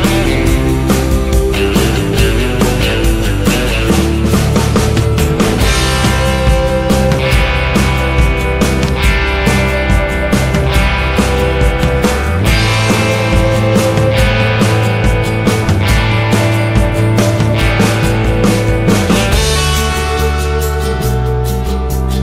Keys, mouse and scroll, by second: 0.8-1.9 drag, 2.1 Tab, 2.3 a, 2.6 u, 8.2 a, 8.4 Tab, 12.0 KP_0, 13.4 n, 15.0 shift+a, 16.7 shift+a.